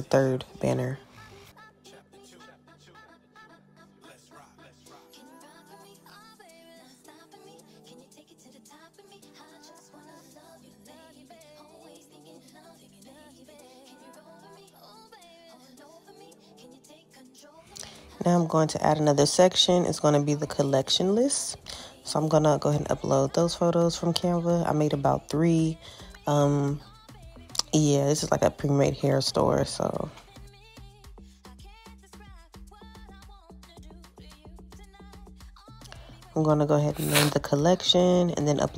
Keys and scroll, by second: 33.8 alt+q.